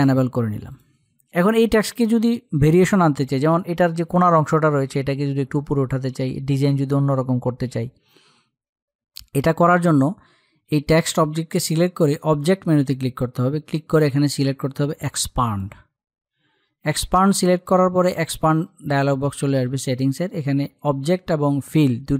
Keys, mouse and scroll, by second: 11.5 click, 14.9-19.9 drag.